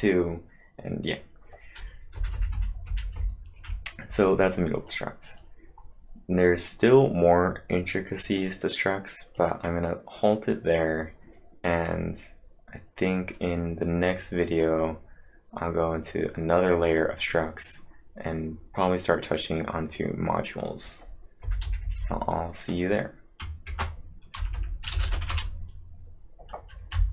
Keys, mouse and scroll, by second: 1.9-3.7 typing, 4.9 click, 5.3 click, 5.8-6.3 scroll up 4, 5.9 click, 7.3-8.0 typing, 9.3 click, 9.3 scroll up 1, 9.4 d, 12.0 click, 12.0 scroll down 1, 12.2-12.8 scroll down 2, 14.3-15.1 scroll up 2, 18.0-18.7 typing, 18.2 scroll up 4, 20.2-22.5 typing, 20.2 scroll up 8, 21.4 scroll up 1, 23.7 ctrl+`, 24.4 Return, 24.6 Return, 24.7-25.7 typing.